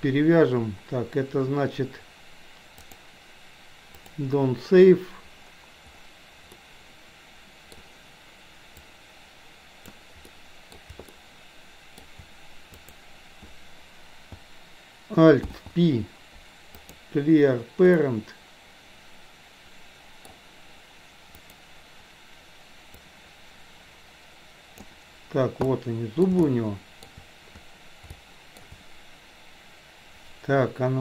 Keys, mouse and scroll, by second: 6.6-7.7 middle drag, 8.9-10.0 drag, 10.4 middle click, 11.2 shift+middle click, 12.7 click, 15.4 alt+p, 18.1-20.4 middle drag, 21.5 click, 23.0-24.9 drag, 25.6-26.4 middle drag, 26.5-27.1 shift+middle drag, 28.2-28.7 shift+middle drag.